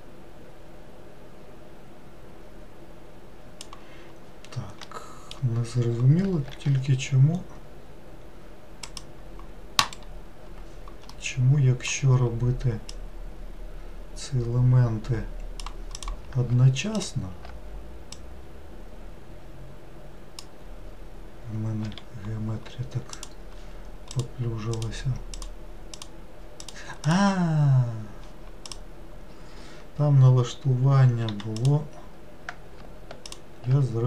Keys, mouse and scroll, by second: 4.8-6.5 middle drag, 6.5 ctrl+r, 11.1-12.9 middle drag, 12.9 click, 16.0 click, 16.9 alt+click, 18.1 click, 21.8 4, 23.1-24.2 drag, 24.7 click, 25.3 click, 25.9 click, 26.6 click, 27.1 click, 28.6 click, 31.2 2, 31.5 click, 33.3 alt+click.